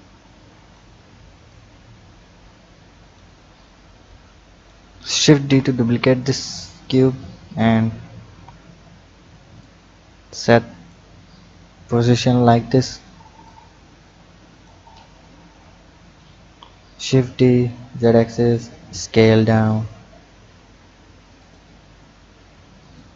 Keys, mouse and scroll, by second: 4.1 click, 5.3 shift+d, 8.2 KP_3, 9.6-12.6 drag, 13.4-15.3 drag, 15.3 KP_1, 16.9 shift+d, 18.7 s, 22.0-23.0 scroll down 2, 23.0 click.